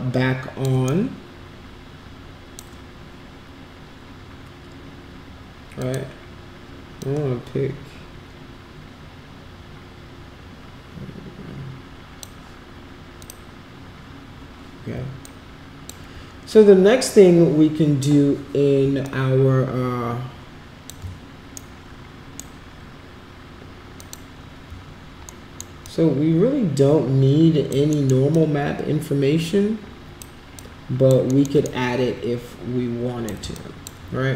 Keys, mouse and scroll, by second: 1.0-2.6 shift+right drag, 5.8 click, 7.0-12.2 drag, 13.2 click, 15.2 alt+click, 19.0-20.9 alt+drag, 21.7 shift+right click, 24.0 click, 25.5 alt+middle click, 25.8-27.7 alt+drag, 27.9 alt+right click, 28.3-30.2 alt+drag, 30.6 alt+click, 31.3 alt+middle click, 31.7-33.4 shift+right drag, 33.6 alt+click.